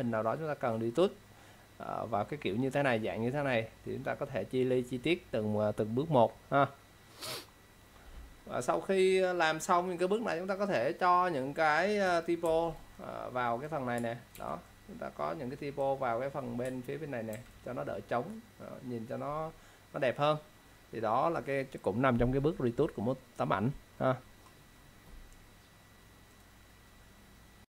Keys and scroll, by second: 14.5 ctrl+z, 17.4 ctrl+z.